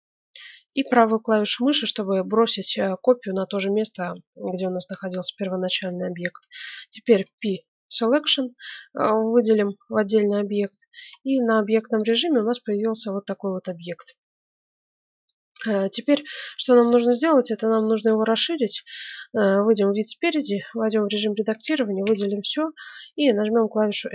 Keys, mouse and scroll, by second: 7.3 p, 10.0 Tab, 11.0 Tab, 11.9-13.8 right drag, 14.1-18.0 middle drag, 18.6 KP_1, 19.6-21.8 middle drag, 20.0 Tab, 21.3 a, 21.6 a, 22.0 a, 23.0 s.